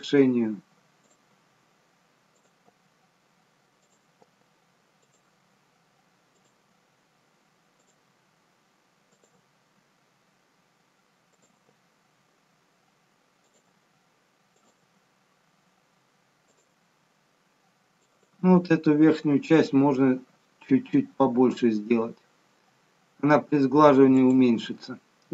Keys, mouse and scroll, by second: 1.3 e, 2.6 e, 4.1 e, 5.3 e, 6.6 e, 8.0 e, 10.1 e, 11.6 e, 13.7 e, 14.9 e, 16.7 e, 18.7 e.